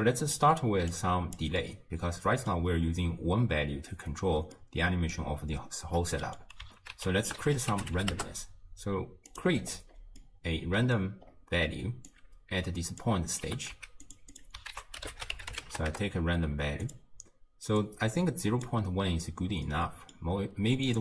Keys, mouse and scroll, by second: 0.9 click, 1.6-2.8 middle drag, 2.8-4.6 scroll down 1, 4.6-6.9 middle drag, 6.9 ctrl+a, 9.6-10.2 scroll up 6, 10.2-11.3 middle drag, 11.3 scroll down 3, 12.1 click, 13.5 g, 14.3 click, 14.7 ctrl+a, 17.8 drag, 19.7-20.9 middle drag, 20.9-21.0 drag.